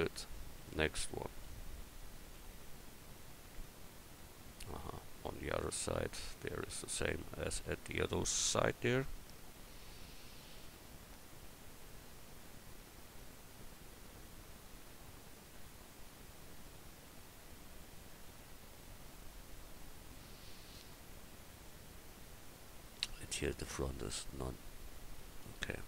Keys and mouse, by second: 1.8 KP_1, 25.2 click.